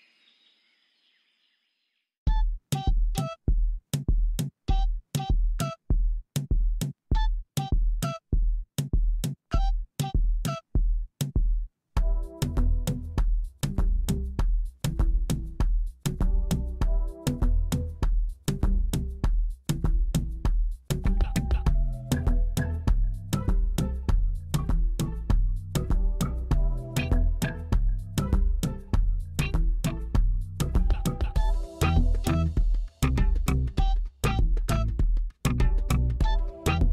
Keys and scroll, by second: 1.3 Tab, 3.4 s, 3.9 y, 5.5 shift+z, 6.3 s, 6.5 y, 7.5 shift+z, 8.0 Tab, 9.0 alt+a, 11.1 s, 13.5 g, 13.6 y, 15.3 g, 15.4 y, 22.8 g, 23.1 x, 25.4 shift+d, 25.5 x, 29.0 shift+d, 29.1 x, 35.1 shift+d, 35.3 y.